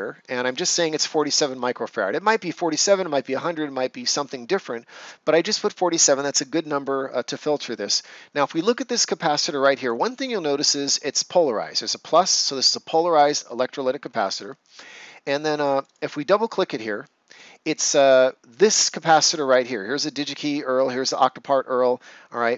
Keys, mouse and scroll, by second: 8.4 click, 13.1-13.6 ctrl+scroll up 1, 14.0 ctrl+scroll, 14.1 ctrl+scroll down 1, 15.7 click.